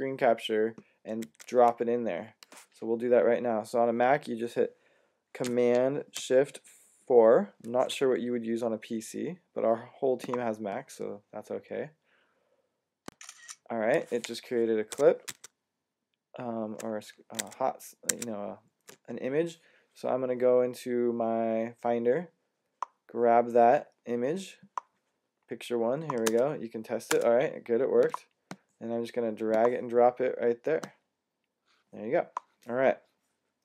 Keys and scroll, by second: 1.1 Tab, 7.5 4, 15.1 Tab, 17.3 super+Tab, 17.9 super+Tab, 18.0 super+Tab.